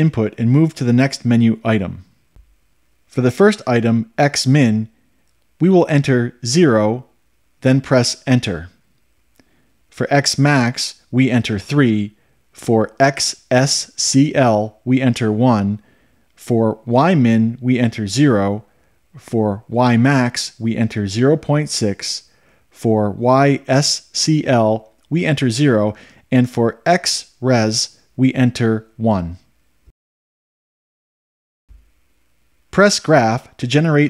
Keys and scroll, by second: 6.8 0, 8.6 Return, 12.2 3, 13.1 Return, 16.1 1, 16.9 Return, 18.9 0, 20.0 Return, 21.5 0, 21.9 ., 22.4 6, 23.4 Return, 26.2 0, 27.5 Return.